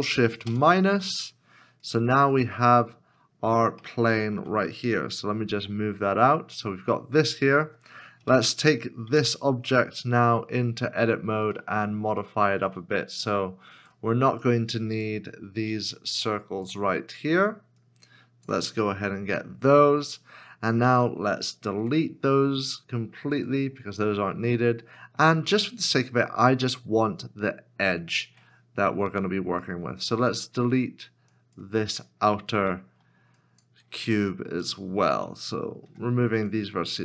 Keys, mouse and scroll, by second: 0.5 ctrl+shift+-, 3.2 ctrl+shift+-, 3.4 scroll down 1, 4.0 shift+middle click, 6.6 g, 8.2 g, 8.3 KP_7, 9.1 Tab, 11.0 scroll up 1, 11.8 shift+middle click, 14.4 shift+click, 15.9 shift+click, 17.8 shift+click, 21.8 x, 24.5 middle click, 28.3 1, 30.6 1, 31.3 shift+click, 32.6 scroll down 1, 33.4 shift+click, 35.8 shift+click, 35.9 x.